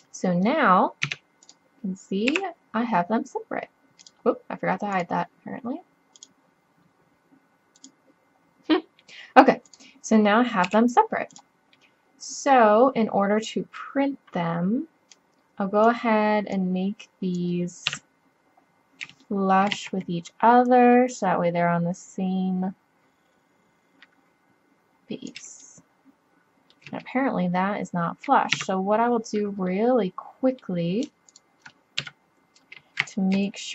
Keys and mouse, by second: 0.0 middle click, 1.1 Tab, 2.3 g, 3.5 click, 9.0-9.7 middle drag, 10.7 g, 11.8-13.9 drag, 15.2-18.5 drag, 17.9 KP_3, 19.8 z, 23.0 middle click, 28.6 Tab, 32.0 KP_3.